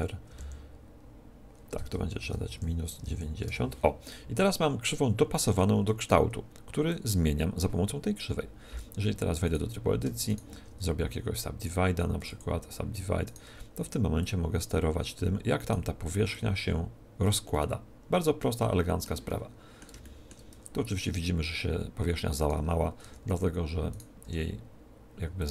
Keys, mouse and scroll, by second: 4.8-7.5 middle drag, 6.8-8.6 drag, 8.6 Tab, 9.4-12.0 right drag, 10.8 w, 12.1 w, 13.2-15.0 right drag, 14.1-15.6 drag, 15.6 middle click, 15.9 right click, 16.2-17.3 middle drag, 17.3 click, 18.0-21.8 middle drag, 20.4 Tab, 22.3-25.5 right drag, 22.9 Tab, 24.2 r.